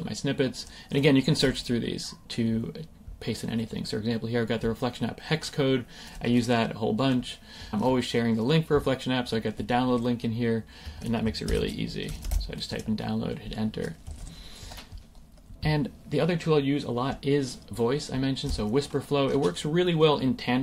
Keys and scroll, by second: 10.8 Escape, 12.8 Return, 14.1 super+a, 14.3 BackSpace, 14.7 Escape.